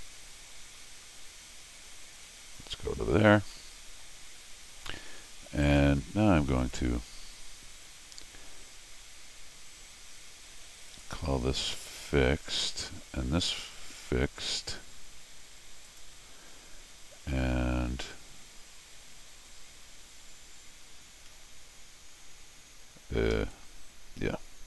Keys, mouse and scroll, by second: 3.3 scroll down 2, 3.5 middle click, 5.6 right click, 6.6 click, 10.9 click, 12.4 click, 13.4 click, 14.1 click, 15.9 click, 23.3 Escape, 23.6 scroll down 2.